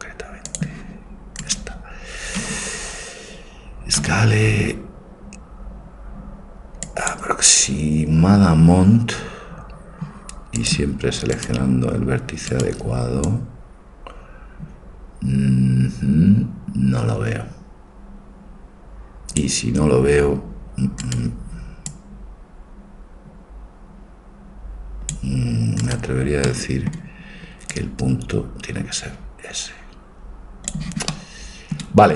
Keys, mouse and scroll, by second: 2.3 click, 2.3 right click, 2.5 s, 10.8-12.5 drag, 11.4-14.8 right drag, 13.3-14.5 drag, 14.8 click, 21.1-23.5 right drag, 22.0-23.1 drag, 23.5-25.2 drag, 25.9-28.4 right drag, 26.5-29.6 drag, 31.1-32.1 middle drag.